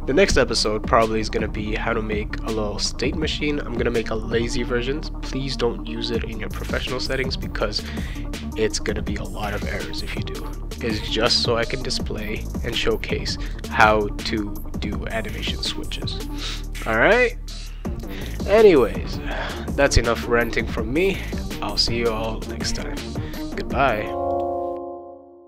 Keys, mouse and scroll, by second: 12.3 click, 19.8 click.